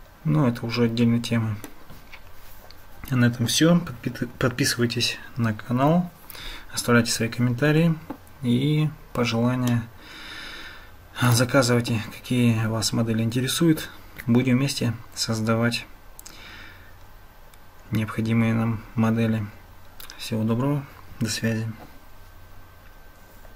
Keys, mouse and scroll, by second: 9.8-11.3 shift+middle drag.